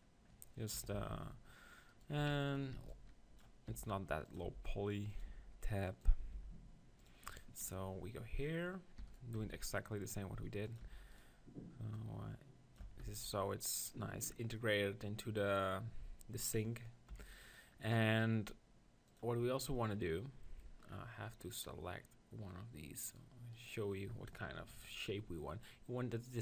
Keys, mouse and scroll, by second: 0.0 click, 0.7 KP_1, 0.9 Tab, 1.9-4.5 drag, 2.2-5.3 typing, 4.3 right click, 6.4 r, 8.1 click, 8.9 middle click, 9.1 e, 9.2 right click, 9.4 s, 9.8 click, 10.2 middle click, 10.3 right click, 10.9 e, 11.1 click, 12.9 Tab, 13.0 z, 17.1 KP_1, 19.1 click, 20.9-23.1 middle drag, 23.1-24.6 right drag.